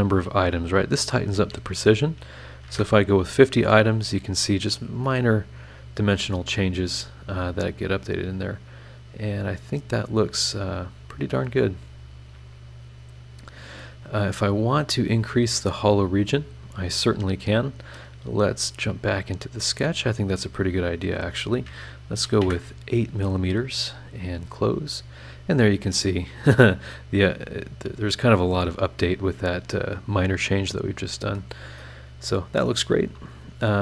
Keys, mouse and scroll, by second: 0.6 click, 2.6 KP_5, 2.7 KP_0, 4.1 click, 5.0-15.5 middle drag, 5.1-15.5 drag, 5.1-15.5 right drag, 16.0-16.7 scroll up 4, 18.2 click, 18.6 click, 19.0 click, 20.2 click, 21.0 click, 22.2 KP_8, 22.4 KP_Enter, 24.2 click, 24.9 scroll down 1, 26.9-31.3 middle drag, 27.0-31.3 drag, 27.0-31.3 right drag, 31.8 middle click, 31.9 click, 31.9 right click, 32.8 scroll down 2, 33.1 click.